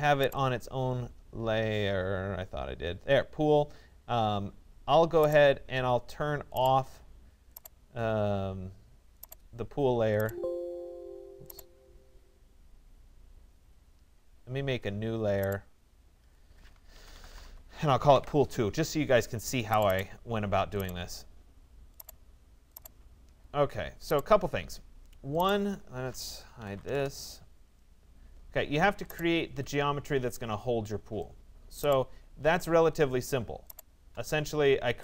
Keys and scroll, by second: 26.5 Return.